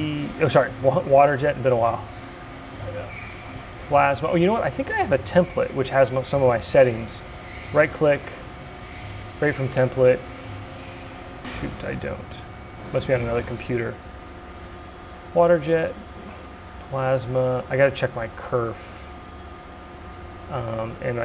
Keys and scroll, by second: 21.0 0.